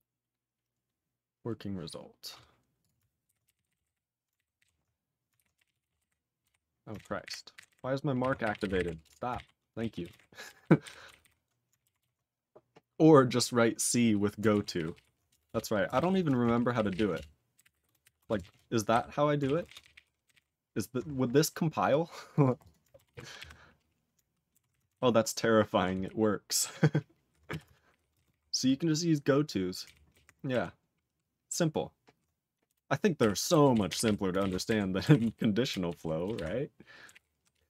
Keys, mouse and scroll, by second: 0.3-2.1 scroll down 1, 2.8 click, 2.8 click, 3.3 ctrl+r, 3.3-4.3 typing, 4.6 ctrl+g, 5.4 ctrl+r, 5.4-6.9 typing, 7.3 ctrl+g, 7.5 ctrl+g, 8.2 ctrl+r, 8.3-9.3 typing, 9.3 ctrl+e, 9.8 ctrl+a, 10.0 ctrl+space, 10.1 ctrl+g, 10.6 ctrl+s, 10.8 ctrl+b, 12.0 ctrl+s, 14.5 ctrl+e, 14.7 ctrl+p, 14.9 ctrl+p, 15.3 Return, 15.5 Return, 15.7-19.0 typing, 16.8 ctrl+p, 16.9 ctrl+p, 16.9 ctrl+e, 17.1 Return, 19.4 ctrl+a, 19.6 ctrl+space, 19.7 ctrl+n, 19.8 ctrl+n, 19.9 ctrl+n, 20.2 ctrl+g, 20.3 ctrl+n, 21.9 click, 22.3 click, 22.4 click, 22.5 click, 22.6 click, 22.7 click, 23.3 ctrl+s, 27.5 q, 27.9 ctrl+p, 28.1 ctrl+space, 28.1 ctrl+e, 28.2 ctrl+n, 28.3 ctrl+n, 31.1 ctrl+a, 32.7 BackSpace, 33.2 ctrl+o, 33.8 ctrl+s, 33.9 ctrl+p, 34.0 ctrl+p, 34.4 ctrl+e, 34.5 ctrl+n, 34.7 ctrl+g, 35.2 ctrl+s, 35.9 ctrl+=, 36.3 ctrl+=, 37.0 ctrl+a, 37.1 ctrl+p, 37.5 ctrl+p.